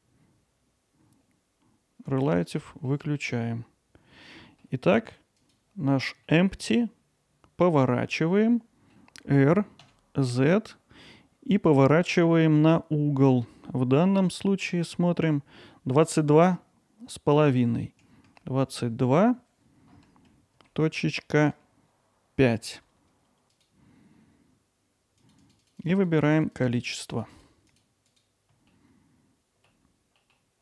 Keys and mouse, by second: 2.1 click, 2.6 alt+middle click, 5.4 click, 6.3-8.0 alt+middle drag, 8.5-8.9 middle drag, 8.9 r, 23.6-25.3 drag, 25.4 click, 25.6 click, 25.8 click, 26.0 click, 26.2 click, 26.3 click, 26.5 click, 26.7 click, 27.3 click, 27.8 click, 27.9 alt+middle click, 28.2 middle click, 28.3 click, 28.4 middle click, 28.8 alt+z, 28.9 click, 29.1 alt+middle click, 29.9 alt+middle click, 30.3 alt+middle click.